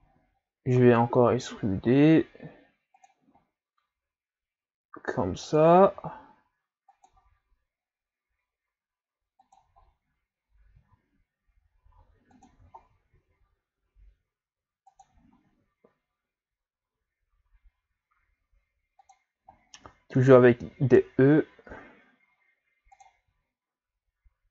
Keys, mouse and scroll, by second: 0.2 e, 3.4 e, 5.9 e, 7.1 e, 9.8 shift+scroll down 4, 10.8 e, 12.8 shift+scroll down 1, 13.1 e, 15.5 e, 19.9 e, 23.3 e.